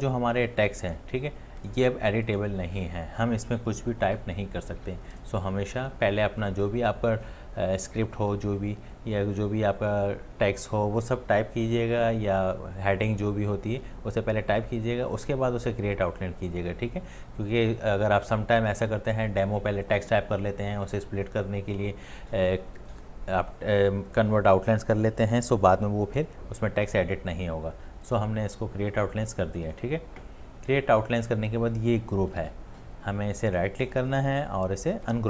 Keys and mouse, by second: 32.4 ctrl+z, 33.5 right click.